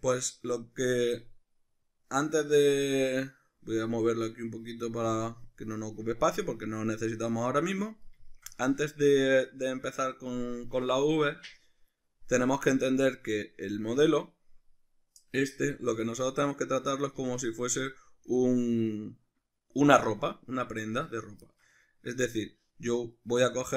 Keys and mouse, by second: 1.8-8.3 drag, 8.3-23.7 shift+middle drag, 16.0 Tab, 17.2 a.